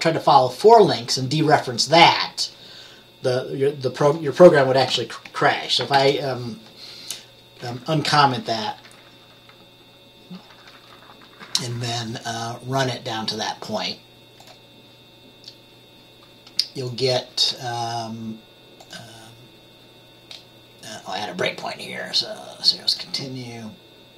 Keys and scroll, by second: 4.9 ctrl+s, 6.0 ctrl+b.